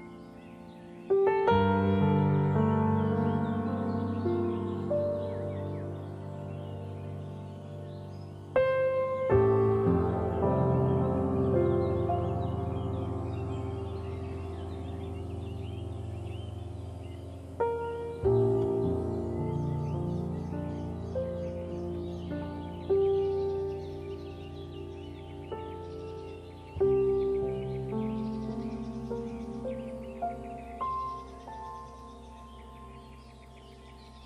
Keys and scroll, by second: 5.1 ctrl+0.